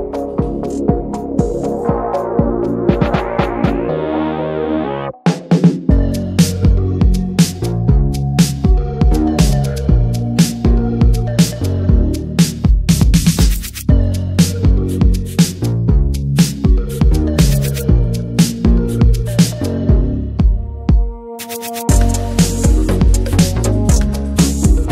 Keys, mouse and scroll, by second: 0.1 alt+shift+click, 0.3 scroll down 1, 0.6-1.3 shift+middle drag, 1.3 scroll up 2, 1.5 middle click, 1.9-3.0 shift+middle drag, 3.0 ctrl+b, 5.9-6.2 scroll down 1, 6.2 ctrl+z, 6.8 alt+shift+click, 7.0 scroll down 1, 7.2 shift+middle click, 7.6-8.0 scroll up 1, 8.0 alt+shift+click, 8.3 shift+middle click, 8.9 alt+shift+click, 9.2 shift+middle click, 9.8 alt+shift+click, 10.0 scroll down 1, 10.1 shift+middle drag, 10.4 Tab, 10.6 click, 10.7 ctrl+a, 11.1 middle click, 11.2 ctrl+s, 11.4 Tab, 11.6-12.1 scroll up 2, 11.7 shift+middle click, 12.1 middle click, 12.5-12.9 shift+scroll up 1, 12.9 ctrl+b, 15.3 Tab, 15.4 scroll down 4, 15.6 shift+middle drag, 15.8-16.1 drag, 16.1 ctrl+1, 16.4 ctrl+2, 16.5 ctrl+click, 16.6 scroll down 2, 17.2 alt+middle drag, 17.4 click, 17.6-18.5 shift+middle drag, 18.5 scroll up 1, 18.7 Tab, 18.8-20.0 shift+middle drag, 20.0 click, 20.6 middle click, 20.8-22.0 scroll up 2, 21.0 shift+middle drag, 22.0-22.5 scroll up 1, 22.5 click, 23.3 click, 23.7 middle click, 24.0-24.5 scroll up 1, 24.5 alt+shift+click.